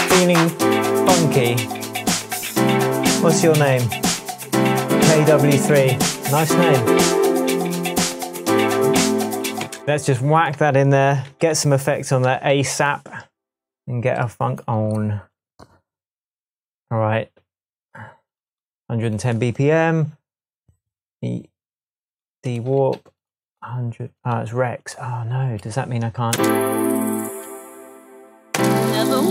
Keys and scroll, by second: 9.6 space, 26.3 space, 27.2 space, 28.5 space.